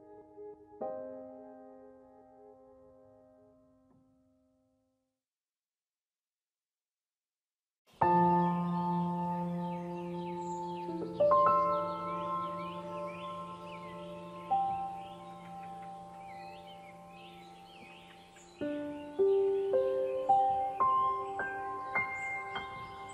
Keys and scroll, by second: 7.6 ctrl+0.